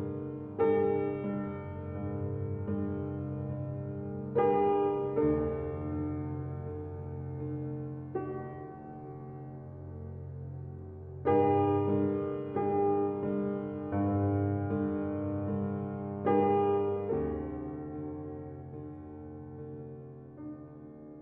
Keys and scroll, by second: 2.3 ctrl+t.